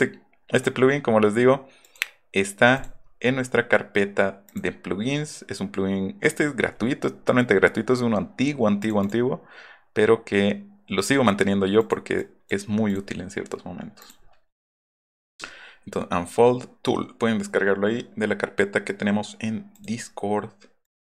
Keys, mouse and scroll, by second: 0.6 click, 1.8 click, 2.8 click, 4.4 click, 8.8 click, 9.0 click, 11.0 click, 11.7 click, 12.2 click, 12.9 click, 14.0 click, 19.7 click, 20.8 click.